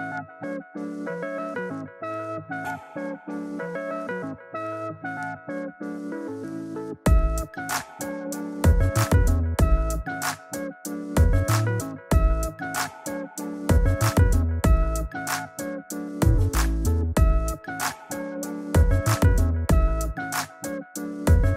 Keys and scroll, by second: 5.2 shift+Down, 6.3 shift+Up, 7.1 shift+Return, 7.7 Return.